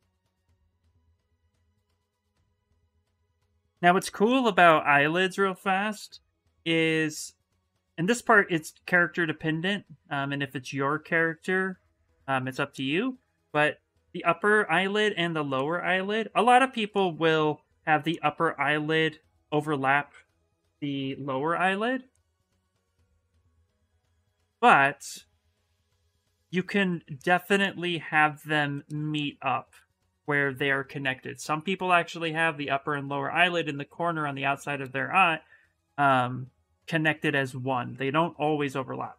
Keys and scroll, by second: 1.0 ctrl+z, 6.3 s, 8.2 s, 16.2 s, 20.2-21.7 typing.